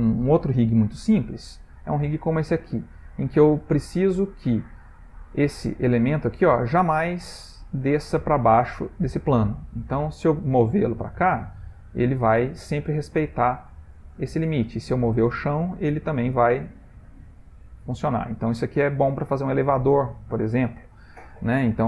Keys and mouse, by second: 1.6 click, 1.9 middle click, 2.9 shift+middle click, 3.8 click, 5.6 g, 14.8 click, 15.2 g.